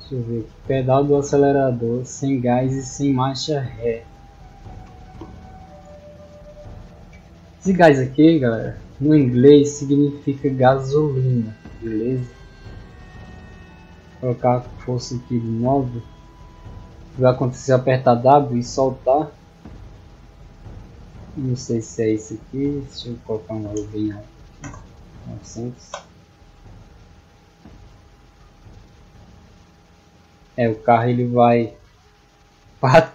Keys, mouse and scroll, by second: 0.2-1.8 middle drag, 2.7-3.7 middle drag, 9.5 click, 10.6 click, 11.8 middle click, 13.1 click, 17.0 a, 17.7 w, 21.8 d, 26.3 w, 26.6 a.